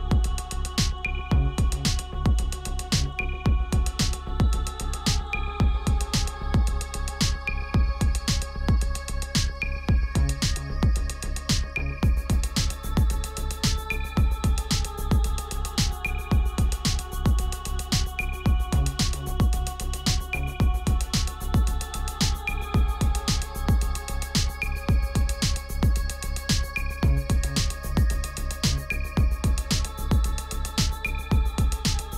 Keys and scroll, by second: 6.4 t, 8.3-11.5 typing, 12.4 Return, 12.8-20.5 typing, 17.2 Return, 27.1 Return.